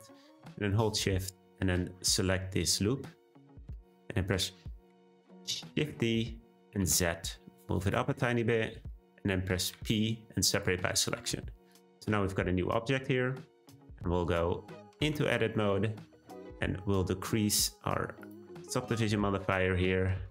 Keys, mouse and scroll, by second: 0.6 click, 0.8 click, 5.1 middle click, 5.7 shift+d, 8.2-9.7 middle drag, 9.7 p, 10.9 click, 11.2 Tab, 11.7 click, 15.0 Tab, 17.5-19.1 drag, 19.1-20.3 middle drag.